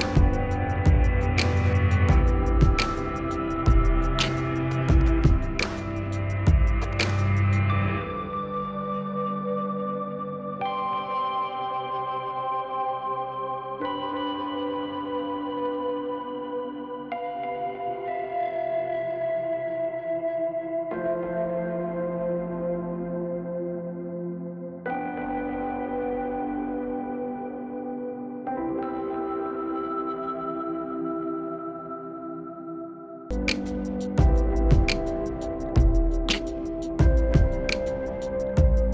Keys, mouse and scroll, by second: 0.2-3.3 drag, 0.2 typing, 3.3 click, 5.9-12.3 drag, 12.3 ctrl+right click, 13.2 click, 14.9 click, 15.2 right click, 15.7 click, 16.7 Up, 18.6 click, 19.3 scroll down 1, 19.9-20.9 scroll down 2, 20.0 click, 20.9 scroll up 1, 21.5 scroll down 1, 22.0 click, 23.3 ctrl+u, 23.7 click, 25.4-27.9 drag, 27.9 shift+Page_Up, 29.0-34.3 drag, 34.3 shift+Page_Up, 35.1-38.9 drag.